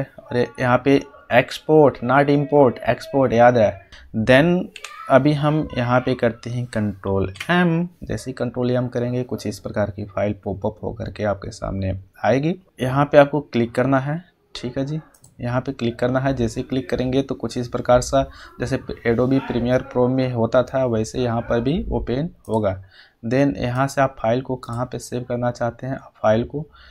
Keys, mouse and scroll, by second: 3.9 click, 4.7 u, 7.2 ctrl+m, 15.1 ctrl+m, 15.5 click, 22.4 click.